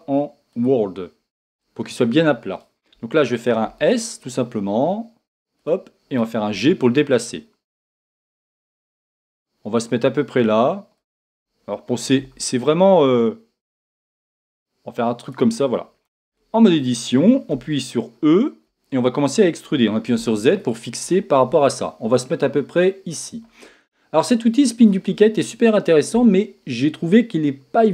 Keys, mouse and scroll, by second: 4.0 s, 6.6 g, 11.1 click, 12.3 s, 15.3 click, 16.1 Tab.